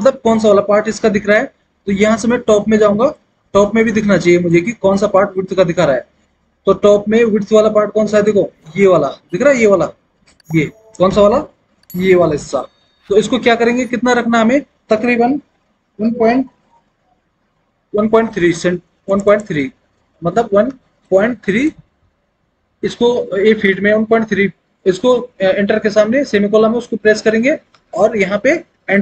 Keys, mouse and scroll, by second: 2.1 alt+w, 20.6 KP_1, 21.7 KP_3.